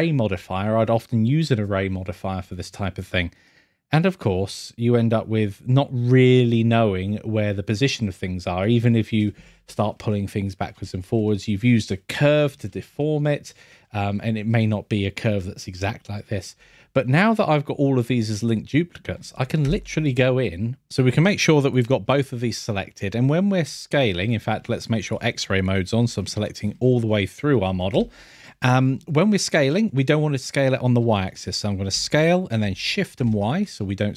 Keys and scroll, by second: 18.8 scroll, 20.9 scroll, 26.7 scroll, 27.9 n, 28.9 scroll.